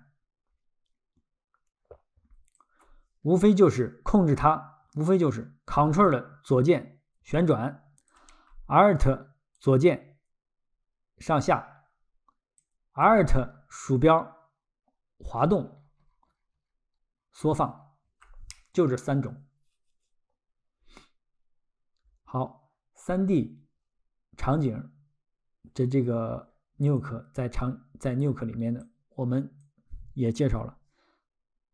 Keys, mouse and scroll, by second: 2.6 ctrl+click, 6.5 ctrl+click, 9.6 alt+click, 12.6 alt+click, 15.3-15.9 alt+scroll, 27.0 ctrl+click, 28.8 ctrl+click, 29.6 ctrl+click.